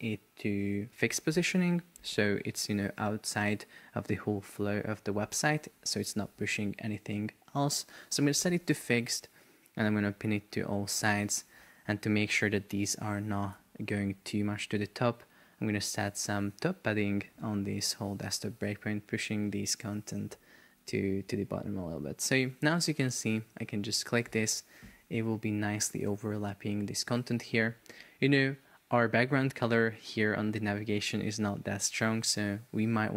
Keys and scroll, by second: 12.2 Return, 13.7 shift+super+4, 14.3 space, 14.6 Escape, 17.9 shift+Up.